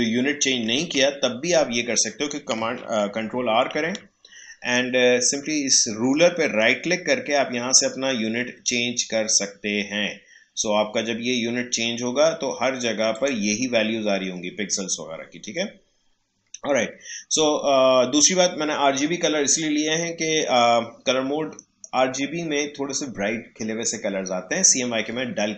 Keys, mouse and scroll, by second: 0.6 ctrl+r, 3.2 ctrl+r, 6.4 right click, 13.1 click.